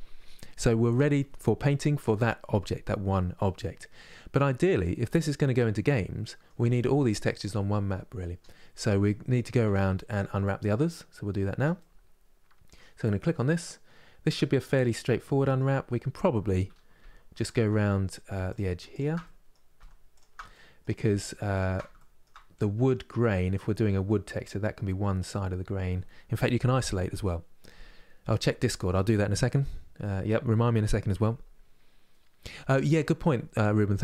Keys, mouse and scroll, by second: 3.6-4.1 scroll down 2, 4.1-5.2 middle drag, 5.2-5.6 scroll down 1, 5.6-9.3 middle drag, 9.3 Tab, 9.8 click, 10.1 middle click, 10.7-11.2 scroll up 3, 11.2 Tab, 11.4-17.1 middle drag, 17.1 alt+click, 17.5 middle click, 18.2 alt+shift+click, 18.6 alt+shift+click, 18.9 middle click, 19.2 scroll up 1, 19.8 alt+shift+click, 20.2 middle click, 20.5 scroll up 1, 20.6 scroll down 1, 21.2 alt+shift+Left, 21.6 shift+middle click, 22.0-22.5 scroll up 1, 22.5-34.0 middle drag.